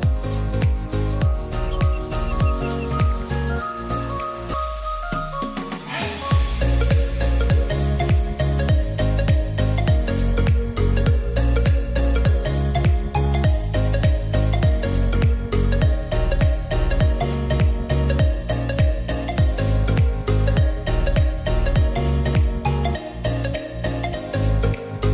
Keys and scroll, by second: 10.0 t, 11.2 e, 24.1 alt+g.